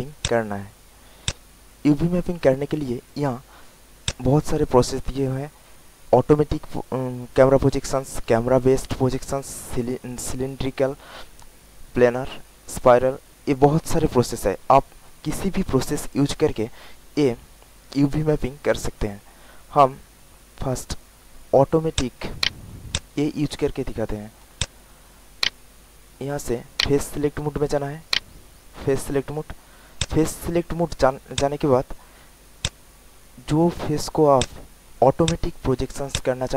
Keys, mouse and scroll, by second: 4.0 click, 21.9 alt+click, 22.4 alt+right click, 22.9 alt+click, 23.3 alt+middle click, 23.8 alt+click, 24.2 alt+middle click, 24.5 alt+click, 25.3-29.4 right drag, 29.6 alt+middle click, 29.9 alt+click, 30.8 alt+middle click, 31.3 alt+click, 32.6-34.0 drag, 34.3 alt+click, 35.2 alt+click, 36.1 alt+click.